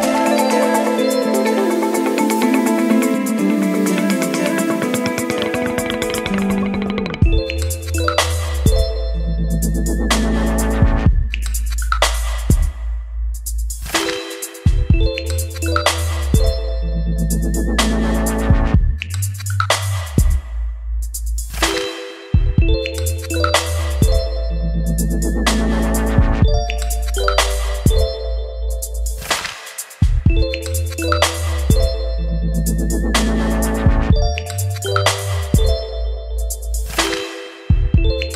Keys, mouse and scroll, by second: 0.0-1.1 typing, 2.0-5.7 drag, 5.7 F5, 10.3-12.1 drag, 12.1-13.4 middle drag, 13.4 scroll, 13.4-14.7 drag, 14.9 ctrl+c, 16.7 click, 17.6 Return, 18.7 ctrl+v, 19.8 click, 20.5 Tab, 20.7 Return, 21.5-23.0 typing, 23.3 Return, 24.2-29.2 typing, 24.9 Return, 28.7 Return, 30.0-31.3 drag, 31.3-31.7 typing, 32.4-35.0 drag, 35.0-36.1 right drag, 36.2 l, 36.3 a, 36.5 b, 37.0 Return, 37.9-38.3 drag.